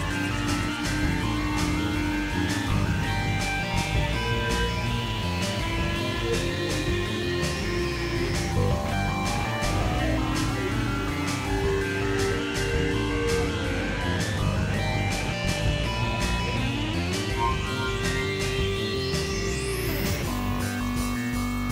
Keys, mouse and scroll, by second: 0.7 click, 1.3 middle click, 2.1 KP_3, 3.1 x, 3.5 click, 4.1 middle click, 4.2 click, 5.7 x, 7.5 click, 8.2 click, 8.9 click, 9.7 click, 11.2 ctrl+z, 11.9 click, 12.8 click, 13.7 middle click, 15.2 KP_Divide, 16.0 click, 16.6 middle click, 17.2 right click, 17.5 KP_Divide, 18.6 click, 18.9 click, 19.5 middle click, 19.6 KP_1, 19.9 KP_3, 20.9 x, 20.9-21.7 drag.